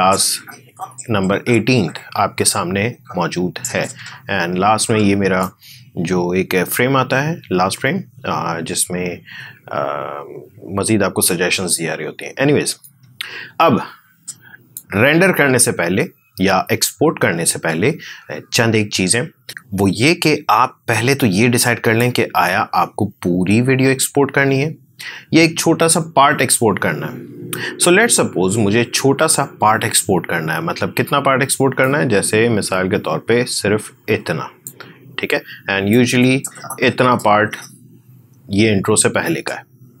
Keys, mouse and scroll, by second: 12.7-21.1 drag, 21.1-24.4 drag, 31.7-40.0 drag.